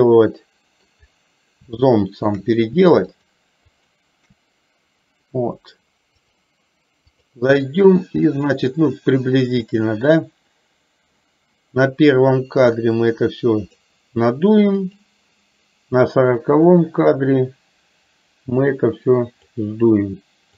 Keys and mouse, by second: 1.9 shift+middle click, 3.1 shift+click, 3.9 shift+click, 6.4-7.4 drag, 10.1 drag, 13.0 click, 14.9 click, 17.0-17.4 drag, 18.6-19.6 drag.